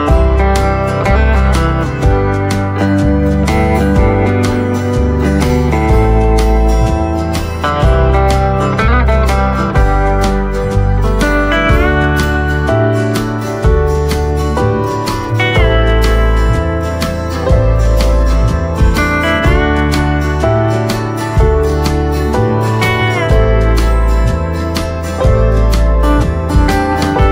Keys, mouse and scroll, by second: 4.6 click, 6.3 right click, 6.9 click, 7.3 right click, 9.2 click, 11.3-12.1 scroll up 1, 13.0 click, 13.7 scroll down 1, 16.1 click, 17.7-18.5 scroll down 1, 20.1 click, 21.9 right click, 23.9 click.